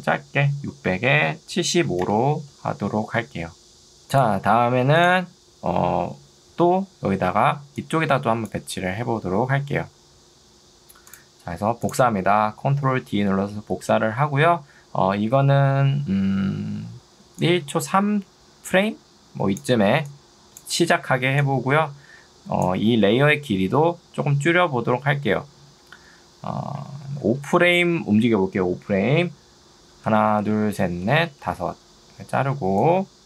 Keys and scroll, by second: 0.1 6, 0.7 Tab, 1.5-2.4 typing, 7.7 2, 9.1 Escape, 13.1 ctrl+d, 19.9 ctrl+2, 21.1 Escape.